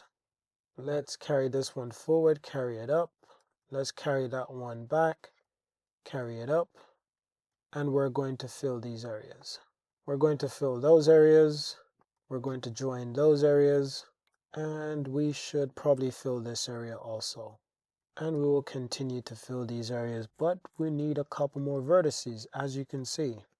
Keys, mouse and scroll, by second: 0.3 g, 1.1 click, 1.3 g, 1.6 z, 2.2 click, 3.5 g, 3.6 g, 4.9 click, 5.1 g, 5.5 z, 6.1 click, 6.4 click, 7.6 f, 8.6 f, 9.9 f, 12.2 j, 14.3 click, 15.5 f, 16.0 Tab, 16.7 Tab, 17.9 f, 18.1 f, 18.5 shift+click, 19.4 super+z, 21.6 super+r, 21.9 click, 23.0 g, 23.2 g.